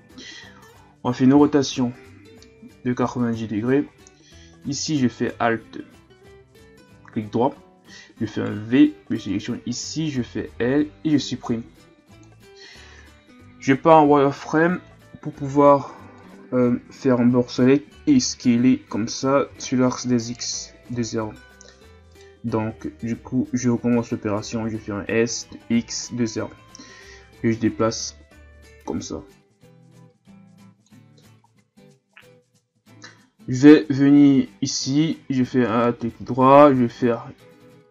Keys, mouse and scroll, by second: 1.3 r, 5.2 alt+right click, 7.8 v, 9.3 right click, 10.4 l, 11.5 Delete, 13.4 z, 14.8 b, 18.6 d, 19.5 x, 22.1 right click, 23.2 ctrl+z, 25.0 s, 27.8-30.8 drag, 32.4-33.2 scroll up 1, 33.2-34.7 scroll up 1, 34.7 right click, 35.7 alt+right click.